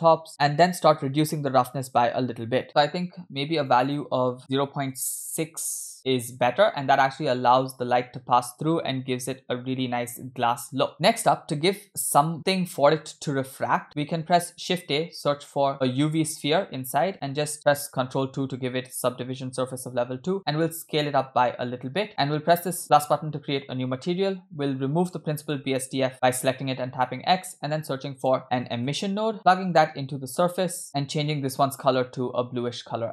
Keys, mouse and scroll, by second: 0.2 scroll down 1, 0.3 click, 1.0-3.8 drag, 3.9-5.1 drag, 6.5 scroll down 2, 6.5 space, 7.2 space, 10.6 space, 11.6 space, 14.4 shift+a, 18.4 ctrl+2, 20.1 s, 22.8 click, 24.1 middle click, 25.0 click, 25.4 click, 27.1 x, 27.4 shift+a, 29.7-30.9 drag, 30.8 scroll up 3.